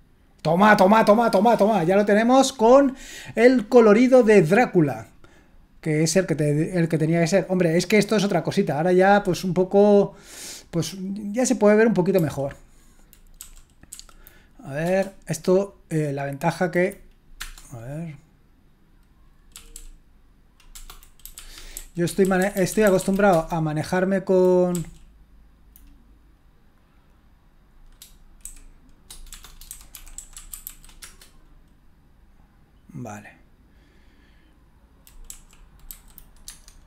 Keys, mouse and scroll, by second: 4.5-10.3 scroll up 1, 10.3-12.1 scroll up 1, 12.1 typing, 13.3 Down, 13.9 Down, 14.8 Return, 17.4 Return, 19.5 k, 19.7 k, 20.7 k, 21.2 Down, 21.3 Up, 21.5 Up, 21.7 Up, 22.0-23.0 typing, 23.3 Return, 24.7 Up, 28.4 shift+d, 29.5-31.2 typing, 35.3 Right, 35.9 Left, 36.4 Tab.